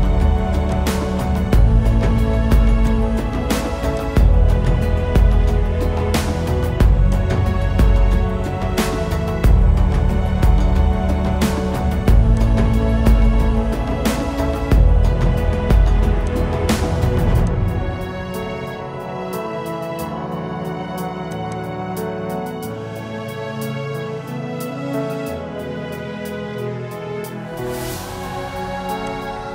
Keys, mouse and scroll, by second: 0.8 double click, 8.3-9.0 typing, 11.2 Return, 13.3-14.1 typing, 15.0 Return, 21.5 double click, 23.1-26.4 typing, 27.1 Return, 27.8 right click.